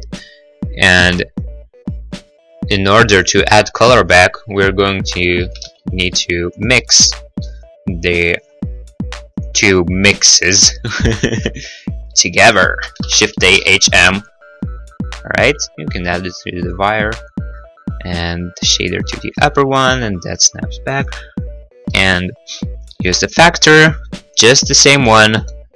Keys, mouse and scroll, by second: 0.6 middle click, 1.2 middle click, 4.4 click, 5.3 click, 5.9 ctrl+z, 6.7 right click, 7.8 g, 8.7 click, 9.7 right click, 10.2 right click, 10.8 right click, 11.8 g, 12.8 click, 13.3 shift+a, 13.3 h, 13.6 m, 15.6 click, 16.3 g, 16.6 click, 17.7 click, 17.9 click, 22.3 middle click, 22.6 middle click, 22.6-23.1 scroll, 23.9 scroll, 24.3 middle click, 24.6 scroll.